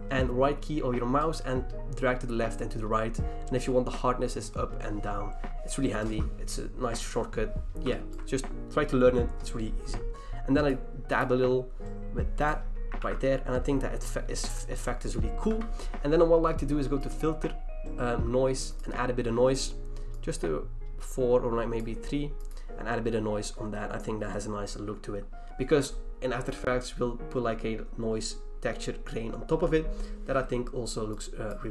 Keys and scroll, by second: 13.0 ctrl+d, 15.5 v.